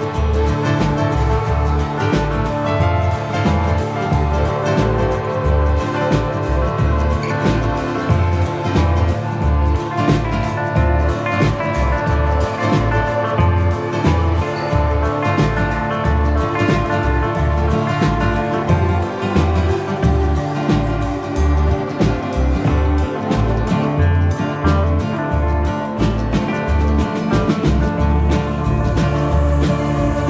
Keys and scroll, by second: 6.3 Delete, 22.1 Delete.